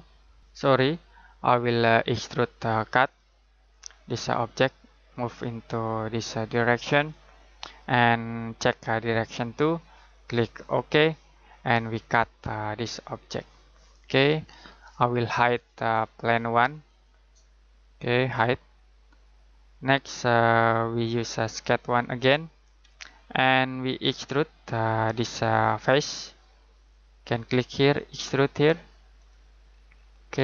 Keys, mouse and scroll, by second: 1.5 click, 5.6 click, 13.2 middle click, 16.8 click, 19.0 middle click, 21.9 click, 22.8 middle click, 23.5-26.1 scroll down 1, 27.3 click, 29.7 scroll down 1, 29.9-30.4 scroll up 1.